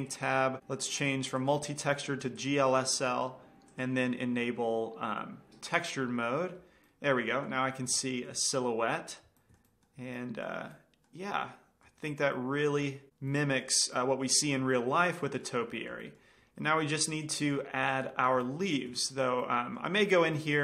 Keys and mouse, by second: 1.9-3.9 drag, 4.2-6.1 drag, 7.4 middle drag, 11.9-12.5 middle drag, 16.1-16.7 middle drag, 17.7-19.5 drag, 19.1-20.6 middle drag.